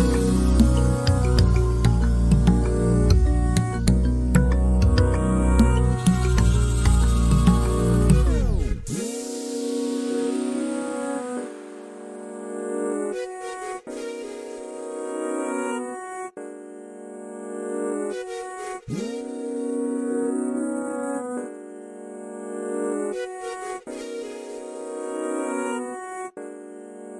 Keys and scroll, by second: 4.9 b, 11.6 space, 23.0 ctrl+a.